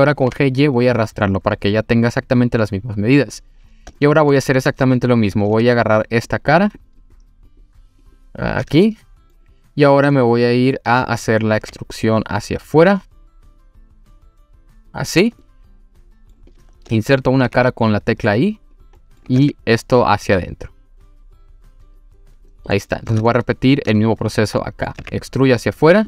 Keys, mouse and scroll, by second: 0.2 g, 0.3 y, 3.2 click, 3.6 scroll up 1, 4.0-4.7 shift+middle drag, 4.8 3, 4.9 click, 5.6 3, 5.7 click, 6.3 click, 6.7 click, 7.0 click, 7.5 click, 8.0 click, 8.9-9.3 middle drag, 10.1-11.2 middle drag, 11.6 e, 15.1 click, 15.4-16.3 middle drag, 16.5 click, 17.5 i, 18.7 click, 19.0 middle drag, 19.4 e, 22.4 click, 22.7-23.1 middle drag, 23.3-23.9 shift+middle drag, 24.2 click, 24.6 middle drag, 25.0 e, 25.9 click.